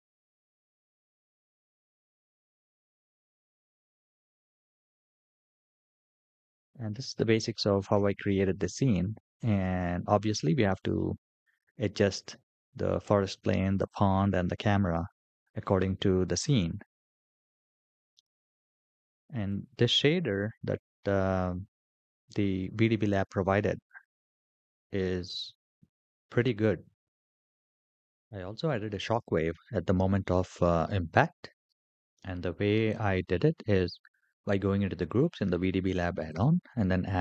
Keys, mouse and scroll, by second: 3.7 space, 4.7 scroll down 2, 5.3-6.7 middle drag, 8.5-8.9 shift+middle drag, 12.8 click, 13.6 click, 15.3-15.8 shift+middle drag, 17.2-18.6 middle drag, 36.1-37.2 drag.